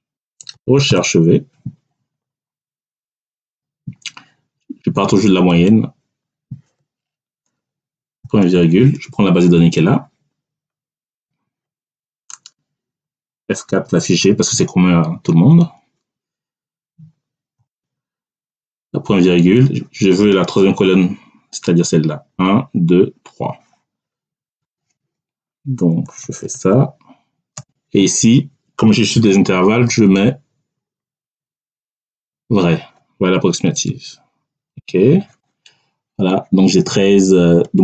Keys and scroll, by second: 0.0-0.9 typing, 8.1 ., 13.6 F4, 17.4 ., 26.1 3, 27.4 ., 33.8 [, 34.7 Return.